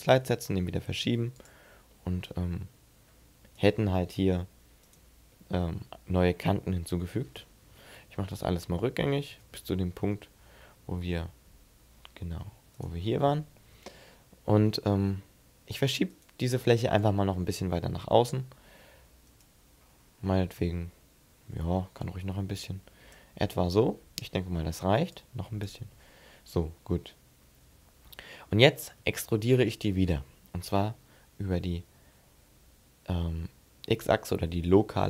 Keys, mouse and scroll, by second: 1.7 middle click, 3.4 right click, 5.1 middle click, 6.4 middle click, 7.6 ctrl+z, 7.9 ctrl+z, 8.1 ctrl+z, 8.3 ctrl+z, 8.4 ctrl+z, 8.5 ctrl+z, 8.9 ctrl+z, 9.1 ctrl+z, 9.3 ctrl+z, 9.7 ctrl+z, 9.8 ctrl+z, 10.3 ctrl+z, 10.5 ctrl+z, 12.2 g, 12.6 right click, 13.0 shift+middle click, 13.9 middle click, 14.5 shift+middle click, 15.9 right click, 16.8 click, 19.6-20.4 scroll down 4, 20.4 middle click, 20.4 scroll down 1, 21.9 click, 23.3 middle click, 24.9 click, 25.9-26.5 scroll down 2, 26.8 middle click, 27.9 scroll up 2, 28.2 scroll down 1, 28.6 scroll up 2, 29.0 shift+middle click, 29.7-30.1 scroll up 4, 30.5 e.